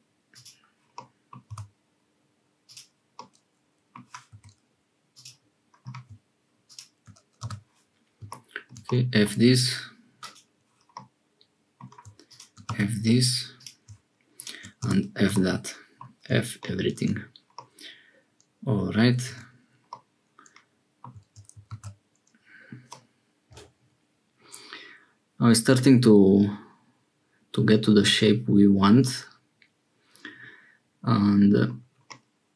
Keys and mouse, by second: 0.9 click, 1.5 g, 3.1 middle click, 4.3 2, 5.1 click, 8.8 middle click, 10.9 click, 11.6 middle click, 12.6 f, 13.5 click, 14.7 f, 15.3 middle click, 17.5-19.0 middle drag, 19.2 Tab, 19.8-21.1 middle drag, 21.7 ctrl+s, 22.8-31.7 middle drag, 32.0-32.5 middle drag.